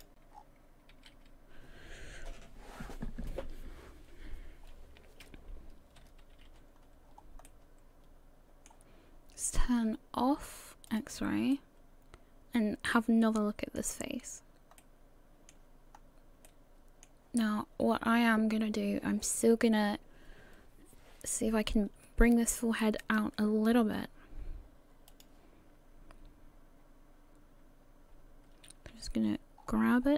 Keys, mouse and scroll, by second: 0.3 scroll down 6, 0.9 a, 2.9 a, 7.1-7.5 scroll down 2, 7.1 a, 7.5 middle click, 10.9 click, 11.5 middle click, 14.3 scroll up 1, 14.8 middle click, 15.9-16.4 scroll up 1, 16.4 middle click, 23.0 right click, 25.1 click, 28.9 g.